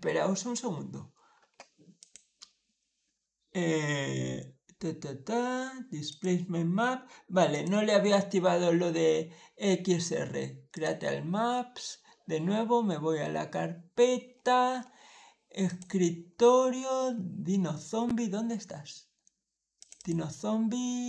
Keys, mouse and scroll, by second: 1.8 click, 5.9 click, 7.4 click, 10.6 click, 14.2 middle click, 14.2-14.5 scroll up 2, 14.6 middle click, 15.5 click, 16.2-16.5 scroll down 1, 16.9 scroll up 1, 17.6 scroll up 1, 19.6 click, 19.8 click.